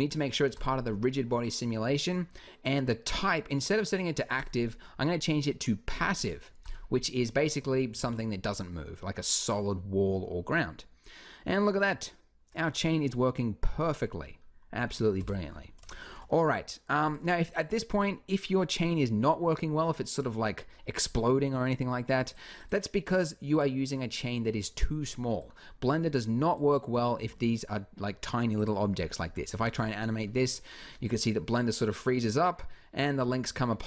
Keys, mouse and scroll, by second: 0.4 click, 7.8 alt+a, 11.4-14.6 middle drag, 15.0 Escape, 24.9 b, 26.9 s, 29.4 alt+a.